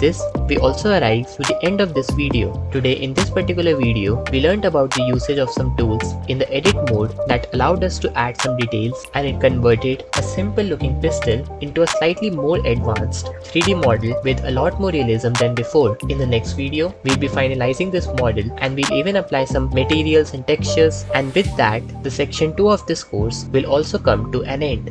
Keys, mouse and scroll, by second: 16.3 Tab, 16.5 3, 16.8 alt+z, 17.1 click, 17.8 ctrl+shift+z, 21.0 Tab.